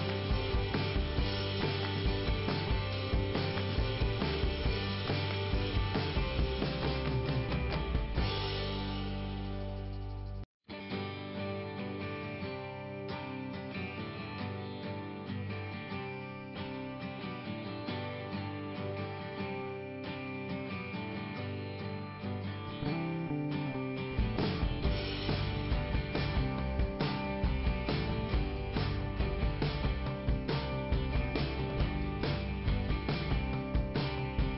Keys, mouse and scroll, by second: 0.7 click, 3.6 click, 4.5 i, 5.2 middle click, 6.1 scroll up 2, 8.1 click, 10.0 click, 12.0 click, 16.4 click, 16.7 right click, 20.9 click, 21.4 click, 21.4 click, 23.6 click, 23.8 click, 29.4 click, 30.5 middle click, 31.4 scroll up 2, 32.7 click.